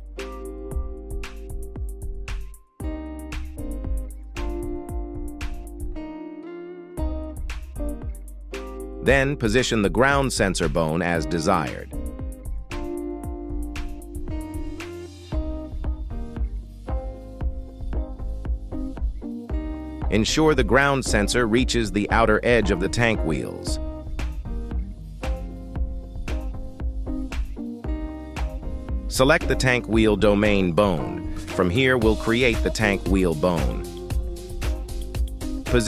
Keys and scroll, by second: 8.5 KP_7, 16.7 KP_3.